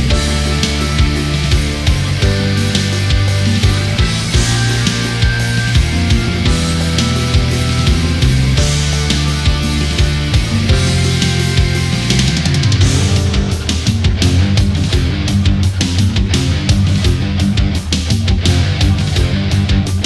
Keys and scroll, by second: 10.4 ctrl+-, 10.8 space.